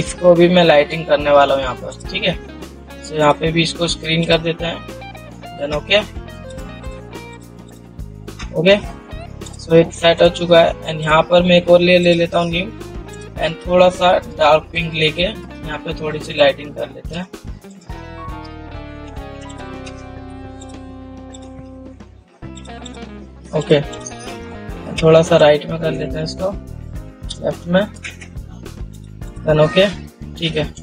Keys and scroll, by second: 25.2 ctrl+t.